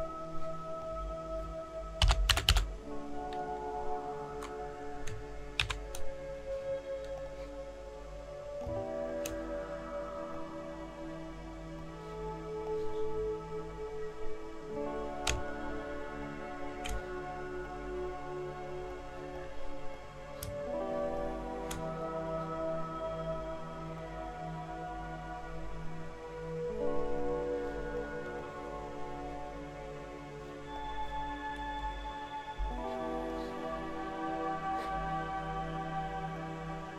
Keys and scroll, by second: 1.8-3.0 typing, 5.6 %, 31.8 shift+Right.